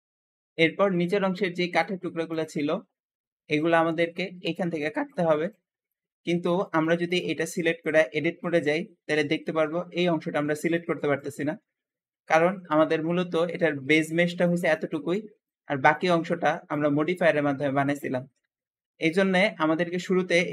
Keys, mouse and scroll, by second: 2.2 shift+click, 6.2 Escape, 6.5 shift+middle click, 7.0 click, 7.5 middle click, 7.8 Tab, 7.8 Tab, 7.9 Tab, 8.3-18.5 shift+middle drag, 18.5 Escape, 18.9-19.3 scroll down 1, 19.3-19.7 scroll up 2, 19.7 Tab, 19.8 Tab.